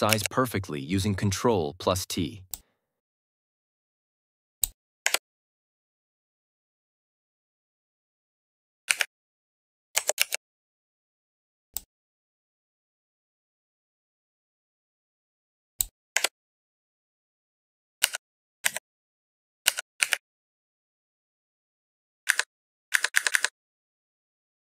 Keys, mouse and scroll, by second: 0.0 ctrl+t, 2.4-4.6 drag, 5.0 Return, 8.8 Right, 10.1 ctrl+t, 11.6-15.7 drag, 16.1 Return, 17.9 Down, 18.5 Left, 19.6 Down, 19.9 Right, 22.2 Up.